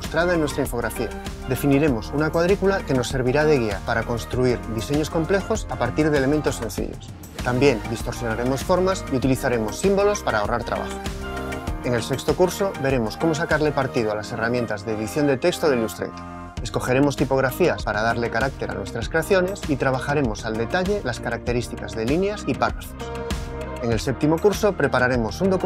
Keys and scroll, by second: 0.0-0.9 typing, 7.3 BackSpace, 8.7-10.2 typing, 10.3 super+-, 10.4 super+-, 10.7 super+-, 20.0 alt+Up, 21.4 alt+Up, 21.5 alt+Up.